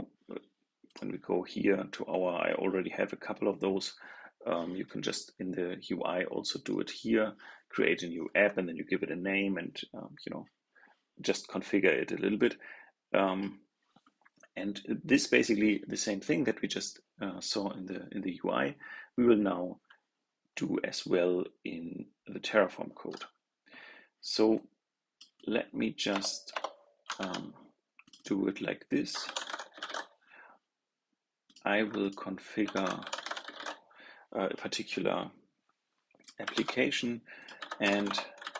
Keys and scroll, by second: 27.1 super+s, 36.4 super+s.